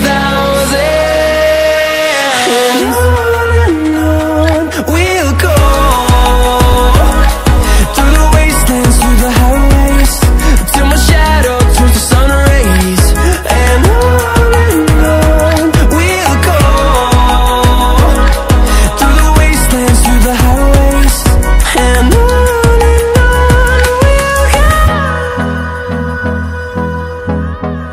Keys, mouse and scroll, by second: 0.1 click, 0.5 ctrl+alt+scroll down 1, 0.9 ctrl+alt+scroll up 1, 2.7 click, 5.4 drag, 9.7-13.6 drag, 18.9 ctrl+a, 20.0 click, 24.2 ctrl+alt+scroll up 2, 25.2-27.9 drag.